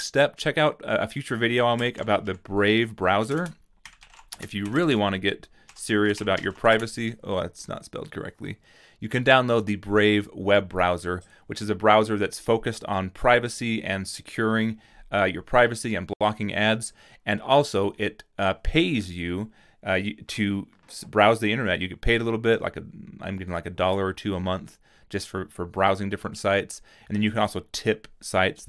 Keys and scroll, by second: 1.6-7.2 typing.